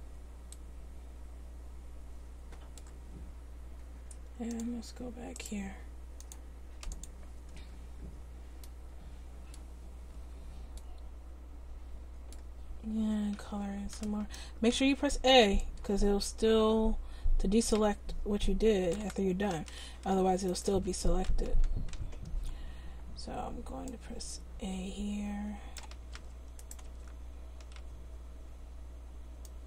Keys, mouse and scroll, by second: 5.4 right click, 6.2-7.8 drag, 7.8 Tab, 8.1-9.2 drag, 9.9 Tab, 10.3 Tab, 12.7 Tab, 13.5 a, 14.7 c, 20.6-23.7 right drag, 20.9 a, 21.9 c, 26.7-29.4 right drag, 26.9 a, 27.8 c.